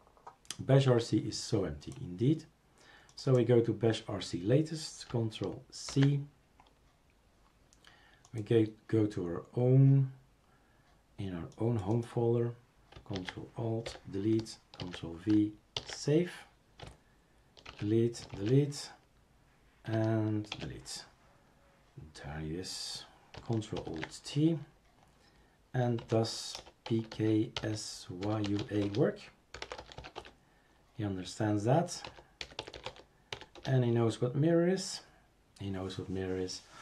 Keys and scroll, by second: 5.9 ctrl+c, 13.1 ctrl+a, 13.8 Delete, 14.8 ctrl+v, 15.8 ctrl+s, 17.7 shift+super+q, 18.3 shift+super+q, 20.5 shift+super+q, 23.8 ctrl+alt+t, 26.0 m, 28.8 Return, 28.8-30.4 typing, 31.8-32.5 typing, 34.5 typing.